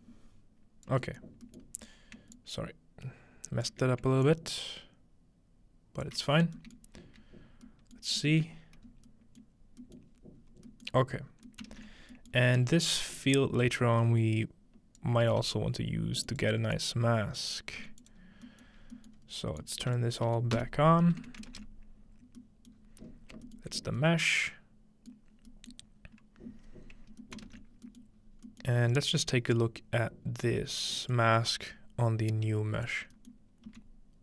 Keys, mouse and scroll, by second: 1.0 middle click, 1.3-1.7 scroll down 1, 2.4-3.7 shift+drag, 4.3-6.1 shift+drag, 6.4-6.9 scroll down 2, 6.6 shift+middle click, 7.0 shift+z, 7.6 scroll up 1, 7.7-8.2 middle drag, 8.5-9.6 scroll up 2, 10.4-10.7 scroll down 2, 11.3 scroll down 1, 11.7 ctrl+space, 12.0-12.6 scroll down 2, 12.6-13.3 scroll up 2, 13.3-15.1 drag, 15.3 g, 15.7-18.8 drag, 17.8 g, 18.2-19.2 scroll down 1, 19.2 scroll up 1, 19.6 click, 20.6 m, 20.8-21.3 scroll up 1, 21.5 ctrl+space, 21.5-21.8 ctrl+drag, 22.8-23.2 scroll up 2, 23.1 middle click, 23.6 alt+middle click, 23.8 scroll up 1, 25.3 middle click, 25.3-26.3 scroll down 1, 25.8-27.2 middle drag, 26.3-27.0 scroll down 1, 27.4-28.0 ctrl+middle drag, 27.7-28.8 scroll down 1, 28.8-29.4 scroll up 1, 31.1-34.2 drag, 33.2-34.2 scroll up 2, 33.7 z.